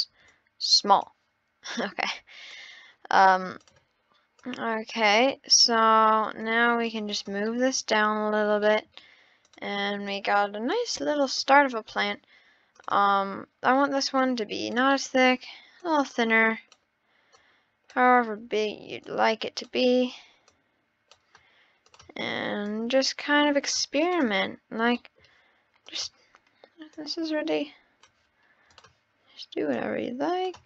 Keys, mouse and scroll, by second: 0.3 click, 1.7 click, 3.6 click, 4.4 click, 6.4 click, 7.1 click, 7.5 middle click, 7.8 scroll up 3, 8.0 scroll, 8.6-9.4 shift+middle drag, 9.4 click, 10.1 click, 11.0 shift+d, 11.7 click, 12.7-14.4 drag, 14.9-15.8 middle drag, 15.8 click, 17.4 click, 19.1 click, 19.8 click, 20.5 click, 21.8 click, 24.0 click, 25.0 middle click, 25.9-27.1 drag, 28.7-29.8 drag.